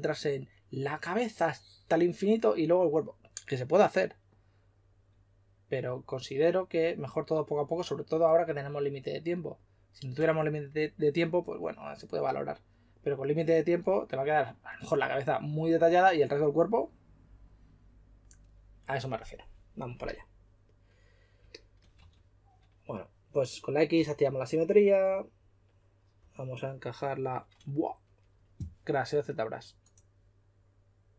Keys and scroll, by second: 21.9 typing, 23.9 typing.